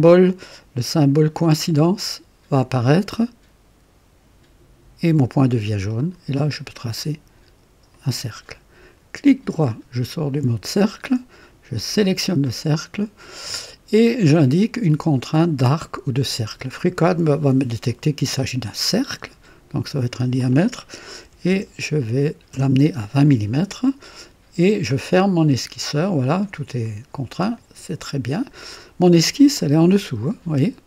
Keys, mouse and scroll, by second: 5.9 click, 7.9 click, 9.4 right click, 11.7 click, 17.7 click, 21.2 KP_2, 21.5 KP_0, 22.5 KP_Enter, 27.5 click, 29.4-30.8 drag.